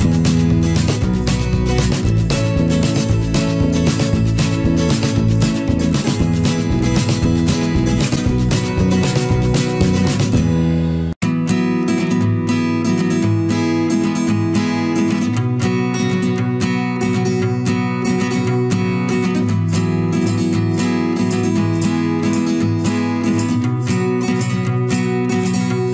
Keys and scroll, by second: 7.1 ctrl+alt+z, 17.1 ctrl+alt+z.